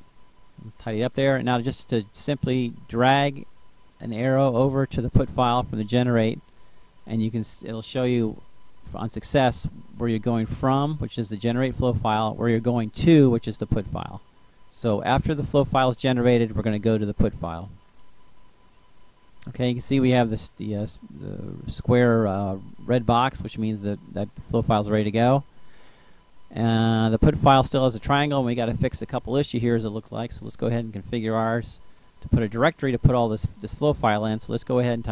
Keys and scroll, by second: 33.7-35.1 typing.